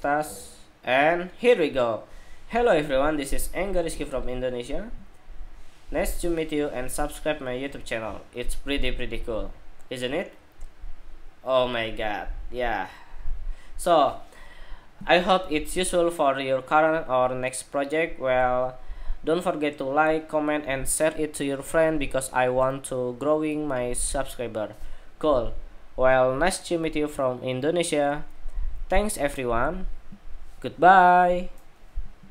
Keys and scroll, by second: 32.1 shift+super+2.